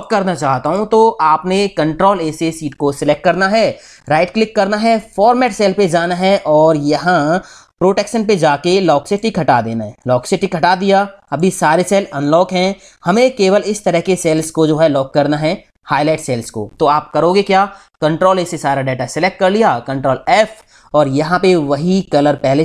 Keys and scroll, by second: 2.2 ctrl+a, 18.1 ctrl+a, 20.1 ctrl+f.